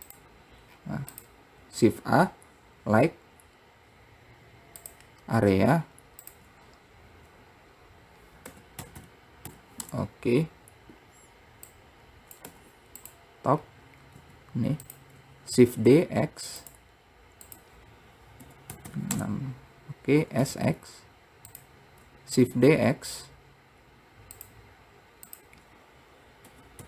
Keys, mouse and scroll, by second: 0.9-1.3 scroll down 2, 1.3 click, 1.9 shift+a, 6.5-9.2 drag, 9.2 KP_0, 11.9 click, 13.8-14.3 scroll up 1, 14.3 s, 15.9 shift+d, 17.7-19.0 drag, 19.0 KP_0, 20.4 s, 22.5 shift+d, 25.4-26.8 drag.